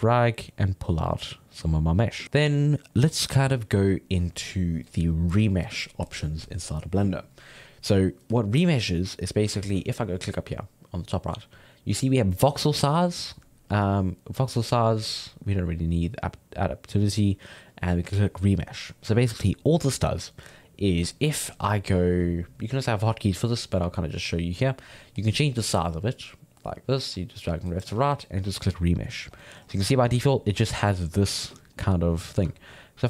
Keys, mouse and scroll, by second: 1.0 middle click, 1.5 click, 2.2-6.9 middle drag, 10.9-16.8 drag, 24.4-27.9 drag, 29.3 scroll down 1, 29.4 middle click, 29.6-30.7 scroll up 4, 30.7-32.5 middle drag, 32.5 Tab, 32.9 ctrl+middle click.